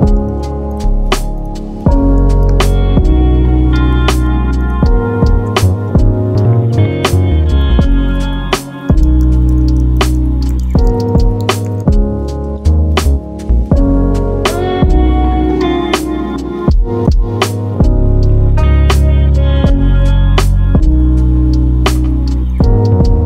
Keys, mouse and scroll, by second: 0.3 middle click, 1.2 Tab, 1.6-2.5 scroll up 1, 2.5 ctrl+r, 5.5 middle click, 5.9 scroll down 2, 6.2 middle click, 6.8 Tab, 7.3-8.2 right drag, 8.2 click, 8.5 click, 8.6-9.6 drag, 13.2 scroll down 2, 13.8-14.6 middle drag, 13.8 scroll down 2, 14.6 shift+click, 15.7 shift+click, 16.1 ctrl+p, 21.0-22.1 middle drag, 22.1 click, 22.5-23.2 middle drag.